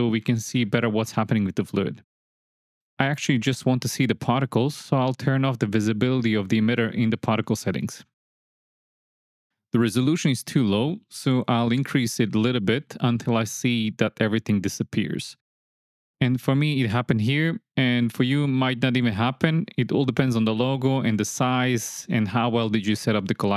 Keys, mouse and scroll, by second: 1.3 space, 3.4 space, 8.8 shift+Left, 8.8 space, 11.7 shift+Left, 12.1 click, 12.4 click, 12.7 click, 13.0 click, 13.3 click, 13.6 click, 13.9 click, 14.2 click, 14.5 click, 14.8 click, 15.1 click, 15.4 click, 15.8 click, 16.1 click, 17.4 click, 18.3 click, 19.4-19.8 middle drag, 19.9 space.